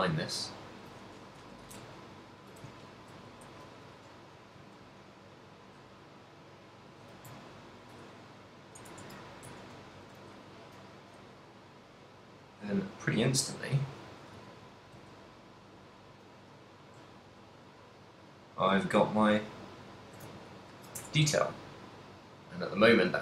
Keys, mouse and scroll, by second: 0.4 middle click, 1.5 KP_1, 2.0 shift+middle click, 2.9 ctrl+middle click, 3.4 z, 3.8 g, 7.0 shift+click, 7.2 z, 7.5 ctrl+middle click, 8.2 middle click, 9.1 Tab, 9.7 Tab, 10.1 s, 12.8 click, 13.3 middle click, 14.3 g, 20.2 shift+click, 20.5 ctrl+middle click, 21.1 Tab, 21.5 a, 21.8 middle click.